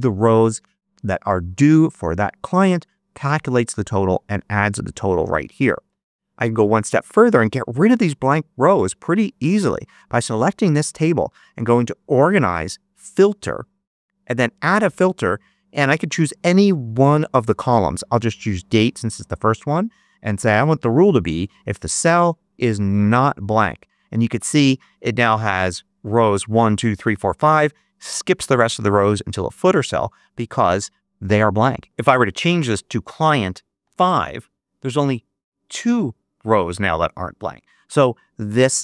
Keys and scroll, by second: 33.7 5, 34.0 Return.